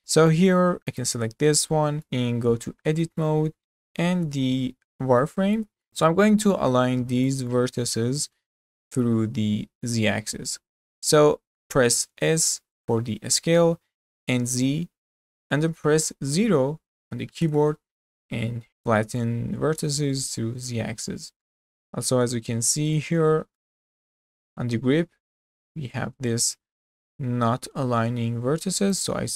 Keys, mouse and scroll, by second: 0.0-0.9 middle drag, 0.9 click, 1.4 scroll up 3, 1.8 shift+middle click, 2.3 Tab, 2.7-3.1 scroll up 2, 3.1-3.5 shift+middle drag, 3.5 z, 4.0 scroll up 3, 5.3-5.9 shift+middle drag, 6.4 click, 7.5-10.5 middle drag, 11.7-12.4 scroll up 2, 12.4 s, 18.3-19.6 middle drag, 19.6-19.9 scroll up 2, 19.9-21.0 middle drag, 21.0 scroll down 4, 21.5-23.1 shift+middle drag, 23.1 scroll up 1, 23.3-26.3 shift+middle drag, 28.9 click.